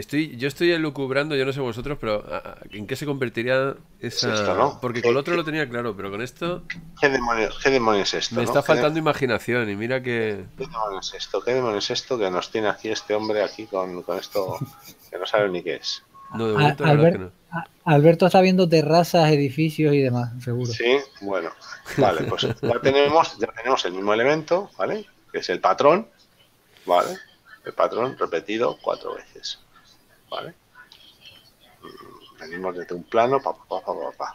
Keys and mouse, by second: 1.3 Tab, 14.9 click, 16.9 shift+click, 20.3 middle click, 34.0 shift+middle click.